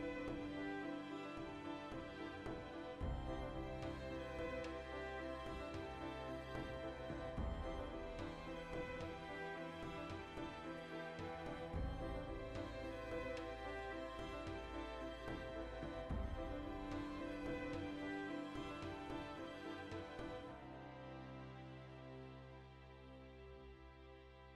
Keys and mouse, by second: 0.4 click, 0.8 g, 2.1 click, 2.3-4.2 middle drag, 4.2 alt+right click, 4.7 3, 5.1 right click, 5.2 middle click, 6.0 alt+right click, 6.2 ctrl+middle click, 6.9 right click, 7.0-9.1 middle drag, 9.1-10.5 shift+right drag, 10.5-11.6 ctrl+middle drag, 11.1 ctrl+KP_Add, 11.6 alt+shift+right click, 12.3 ctrl+KP_Add, 12.7 alt+shift+right click, 13.4 ctrl+z, 14.1 alt+shift+right click, 14.7 ctrl+KP_Add, 15.6-17.3 middle drag, 16.2 g, 17.5 alt+shift+right click, 17.7-20.7 middle drag, 20.7 alt+right click, 21.2 ctrl+z, 21.7 g, 22.3 right click, 22.6-23.6 shift+middle drag, 23.6 g.